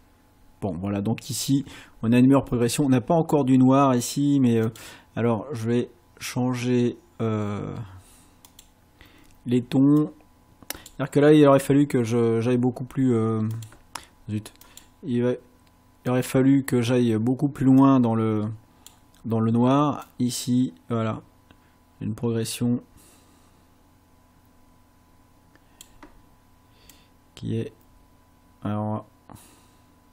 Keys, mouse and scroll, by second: 4.7 click, 8.5 click, 10.0 click, 13.6 click, 14.7 click, 16.1 click, 17.8-19.0 drag, 20.1-26.0 drag, 27.0-30.1 drag.